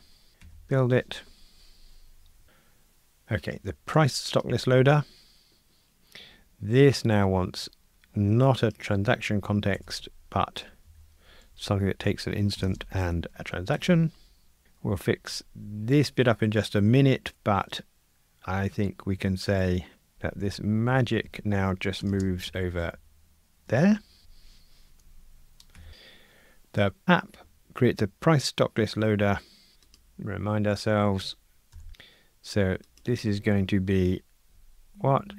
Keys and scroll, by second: 0.4 super+F9, 4.5 super+b, 10.8 Delete, 13.8 Escape, 20.5 Delete, 24.2 Delete, 30.0 super+b, 31.7 super+b.